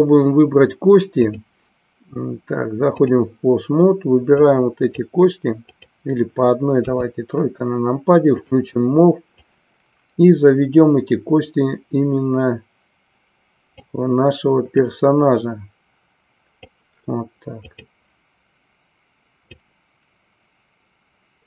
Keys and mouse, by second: 1.4-3.1 drag, 4.4 click, 5.6 click, 7.0 KP_3, 8.4 click, 9.5-13.8 drag, 15.0-16.7 drag, 19.5-21.4 drag.